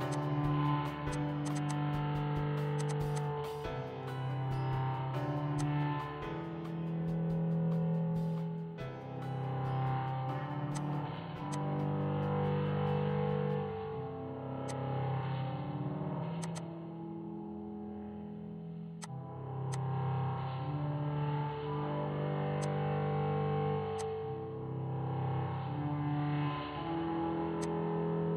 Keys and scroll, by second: 1.3 ctrl+g, 3.9 ctrl+c, 3.9 Escape, 5.4 p, 8.2 Escape, 9.5 m, 12.7-14.9 typing, 16.0 Escape, 16.1 typing, 19.6-23.4 typing, 28.0-28.3 typing.